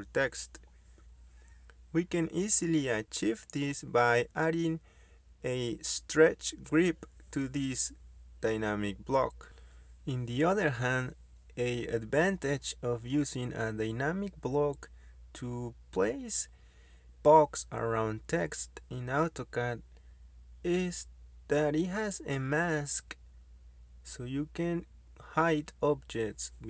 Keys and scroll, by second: 2.7-4.5 typing, 15.5 Escape.